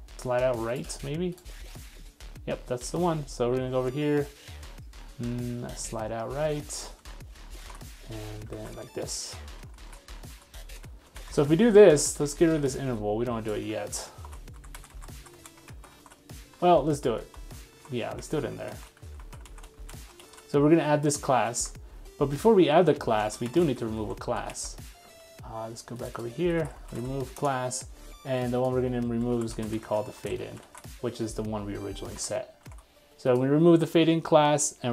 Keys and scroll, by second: 2.8 super+3, 7.6 super+1, 8.6 super+v, 11.3 super+x, 14.3 super+/, 16.0 super+s, 16.7 super+z, 18.8 super+s, 20.2 super+s, 23.4 super+s, 23.6 super+c, 24.6 super+v, 30.6 super+s, 32.2 super+Tab, 32.7 super+Tab.